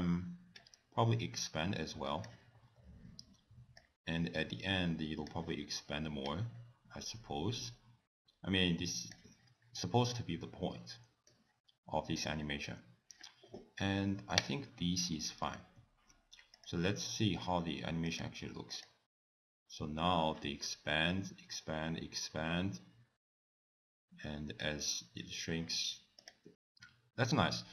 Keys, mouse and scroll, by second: 0.6 click, 2.6 scroll down 3, 3.8 click, 6.2 click, 10.2 middle click, 12.1-13.1 scroll down 1, 14.4 click, 15.8 ctrl+s, 16.6 click, 18.1 click, 18.7 click, 20.8-21.5 scroll down 3, 26.2 click.